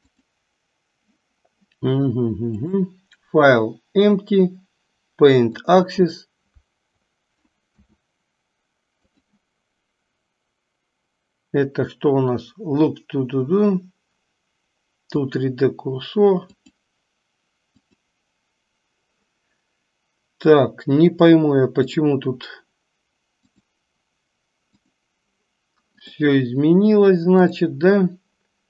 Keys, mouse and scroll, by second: 0.1 click, 2.6-5.9 drag, 7.6 s, 16.8 click, 17.9 click, 23.4 click, 26.0 click, 27.4 click.